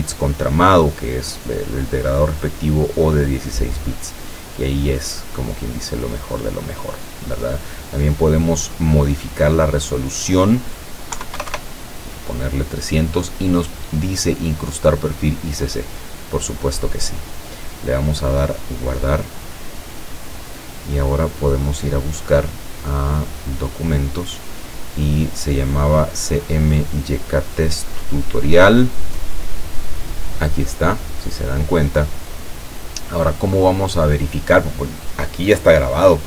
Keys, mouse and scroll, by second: 4.0 click, 10.1 click, 11.2 KP_3, 11.4 KP_0, 18.8 click, 23.5 click, 27.9-28.4 scroll down 1, 31.3 click.